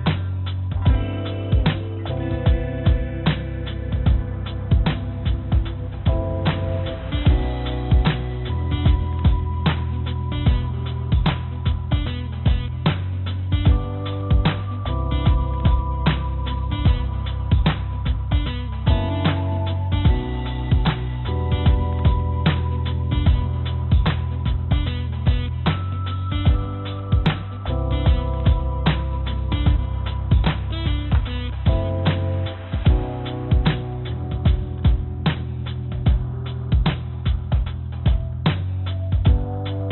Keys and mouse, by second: 2.6 click, 2.7 click, 5.2 3, 6.3 shift+click, 6.8 shift+click, 8.0 shift+click, 9.3 shift+click, 10.6 shift+click, 11.6 click, 14.6-17.7 drag, 19.4 click, 20.1 click, 21.4 shift+click, 22.5 shift+click, 23.5-24.8 drag, 25.6 click, 28.5 click, 30.4 click, 31.2 click, 32.3 click, 33.1 click, 33.7 click, 35.6 shift+click, 36.3 shift+click, 37.0 shift+click, 37.4 shift+click, 37.8 shift+click, 38.7 shift+click.